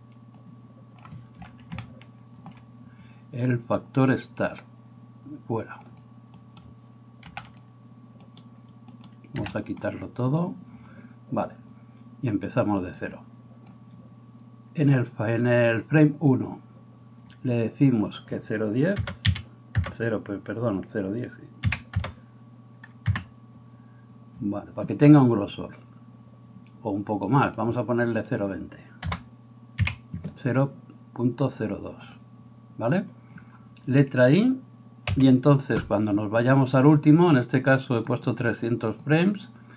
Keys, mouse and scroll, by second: 1.0-1.7 middle drag, 6.4 right click, 7.3 x, 8.2 middle click, 8.2 right click, 8.9 middle click, 8.9 right click, 9.4 x, 32.2-39.7 middle drag, 38.1-39.7 drag.